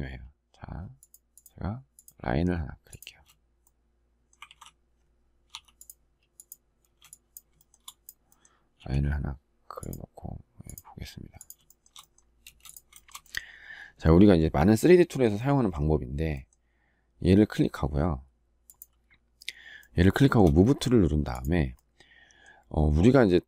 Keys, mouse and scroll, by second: 2.8 space, 4.2 ctrl+z, 6.6 space, 7.3 shift+middle click, 8.5 q, 11.4 shift+middle click, 12.2 space, 12.8 shift+middle click, 12.8 shift+double middle click, 20.1 shift+middle click.